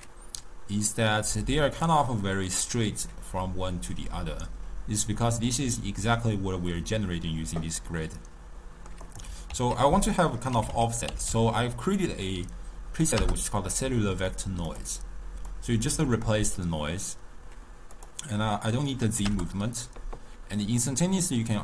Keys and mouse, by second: 0.9-4.0 drag, 7.8-9.1 middle drag, 9.1 click, 9.6 ctrl+a, 15.6-21.1 drag.